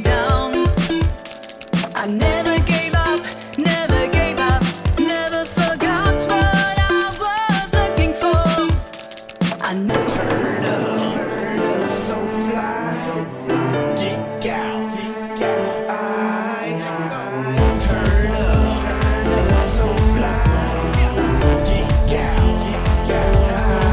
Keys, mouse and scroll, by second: 1.3 click, 1.6 click, 2.2 click, 3.5 click, 5.0-6.7 typing, 7.1 Return, 8.1 click, 8.1-8.9 typing, 11.4 click, 11.9 click, 12.1 click.